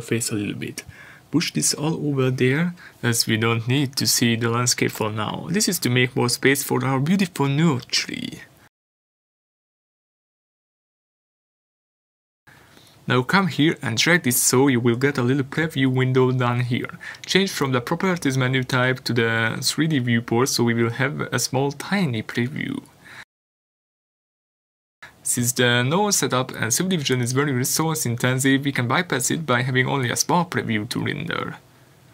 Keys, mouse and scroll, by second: 1.0-7.3 drag, 20.3 click, 21.6-22.0 scroll down 1, 22.4-22.8 scroll up 1, 26.3 scroll down 1, 26.9 scroll up 1, 27.1 middle click, 27.9 scroll up 1, 29.2 shift+middle click.